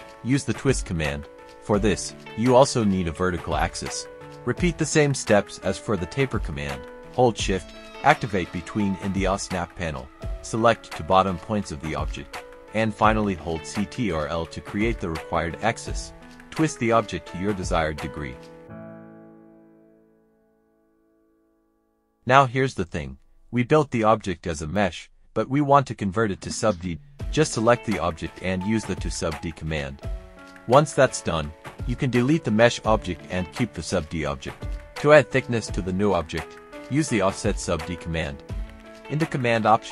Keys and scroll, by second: 0.5 typing, 2.4 space, 24.9-28.6 typing, 30.2 typing, 31.9 Delete, 34.1-36.8 typing, 38.5 typing, 39.5 typing.